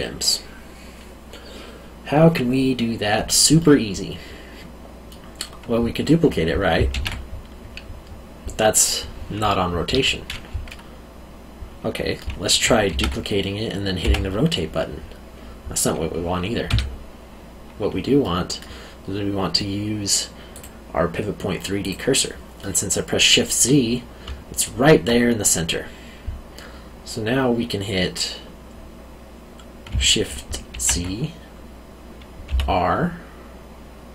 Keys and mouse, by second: 3.6 middle click, 6.9 shift+d, 9.8 Escape, 10.7 middle click, 12.9 shift+d, 14.0 r, 16.7 Escape, 18.2 middle click, 20.5 click, 22.6 middle click, 24.2 alt+middle click, 30.7 shift+d, 32.4 r.